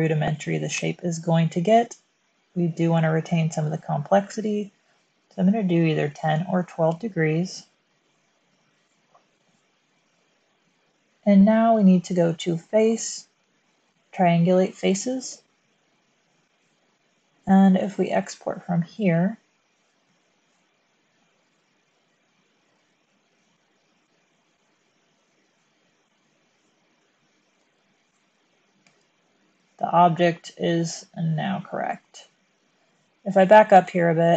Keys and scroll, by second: 6.0 1, 6.2 2, 6.8 Return, 8.9 typing, 16.3-17.1 typing, 19.7-20.2 typing, 28.7 space, 33.9 super+z.